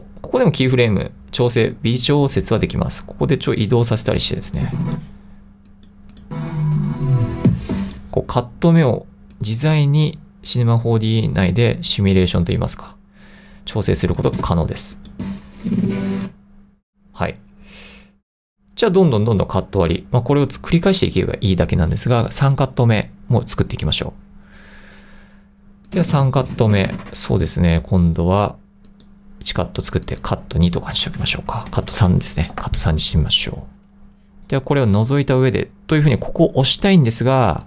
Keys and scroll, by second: 31.2 c, 31.8 0, 32.1 3, 32.6 Return.